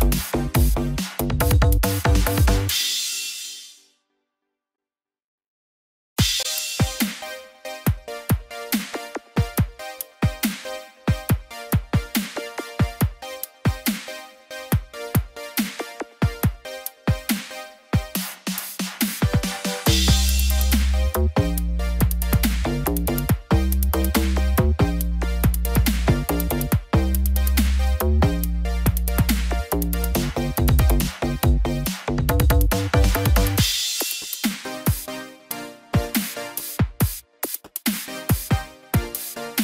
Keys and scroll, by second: 5.3 ctrl+0.